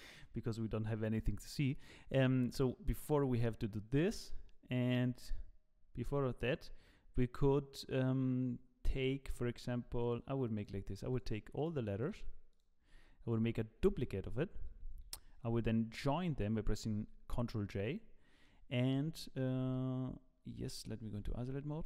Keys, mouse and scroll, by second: 3.0 click, 4.0 click, 10.0 shift+click, 10.5 shift+click, 12.9 shift+click, 13.8 shift+d, 16.2 ctrl+j, 17.7-18.2 ctrl+middle drag, 19.5 g, 21.1 KP_Divide.